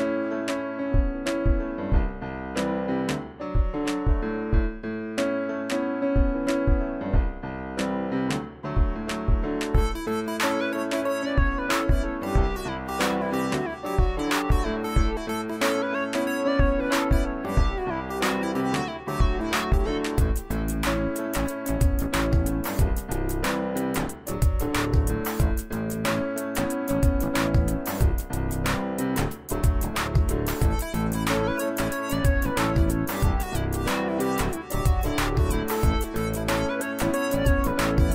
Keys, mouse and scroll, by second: 1.4 click, 3.7 click, 11.4 click, 17.7 click, 20.6 click, 21.1 shift+h, 25.0-28.7 drag, 31.8 shift+Num_Lock, 31.9 click, 32.0-32.3 shift+drag, 34.4-34.8 drag.